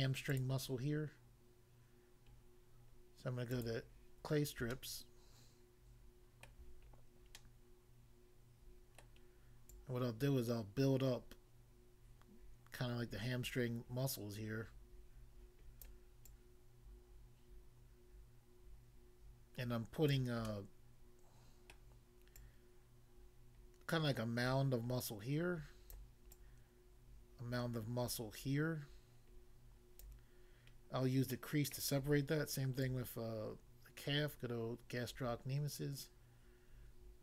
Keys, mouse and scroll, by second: 0.3 click, 0.4 click, 3.5 click, 3.6 click, 4.2-4.7 scroll up 1, 4.7 shift+middle click, 6.9-7.4 scroll up 1, 9.0 middle click, 9.8 click, 15.8 click, 16.2 click, 20.2 click, 20.5 middle click, 21.8 middle click, 22.3 click, 26.0 click, 26.4 click, 30.0 click, 31.3 middle click, 31.8 middle click, 32.8 click.